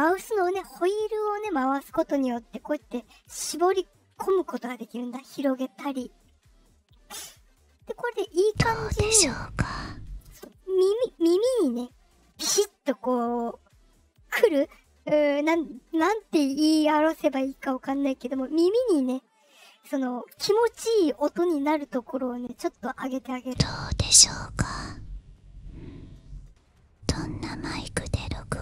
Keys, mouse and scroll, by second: 1.4-2.3 scroll down 5, 3.6-4.9 scroll down 4, 8.1-10.2 drag, 8.3 space, 10.2 space, 20.0 scroll down 2, 20.9-28.6 drag, 23.3 space.